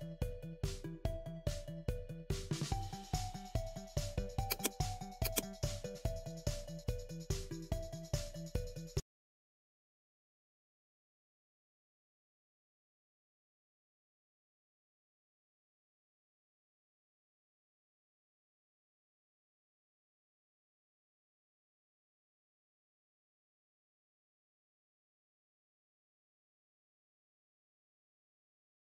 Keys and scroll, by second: 0.3 Down, 1.4 Up, 1.9 Down.